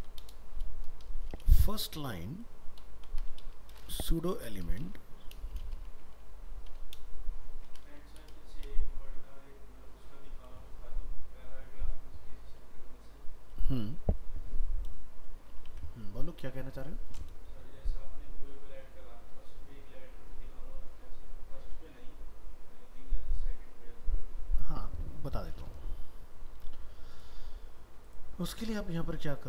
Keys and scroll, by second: 15.7 alt+Tab, 26.6 alt+Tab.